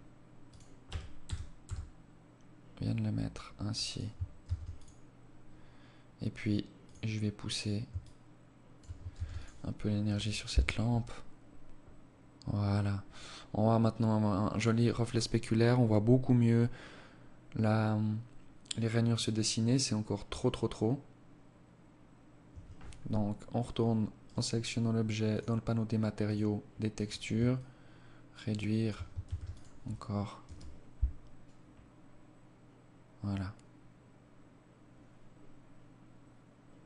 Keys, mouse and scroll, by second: 3.5 ctrl+s, 5.9 click, 7.1 shift+click, 8.2 ctrl+s, 21.5 Escape, 23.3 right click, 24.3 click, 25.3 click, 26.6 shift+click, 28.3 ctrl+s.